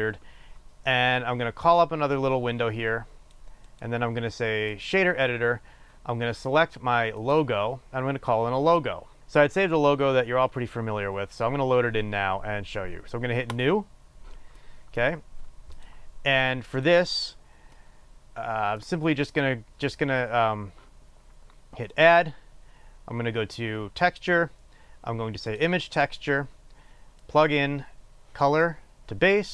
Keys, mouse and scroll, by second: 2.9 click, 3.8-7.9 drag, 14.4-17.1 drag.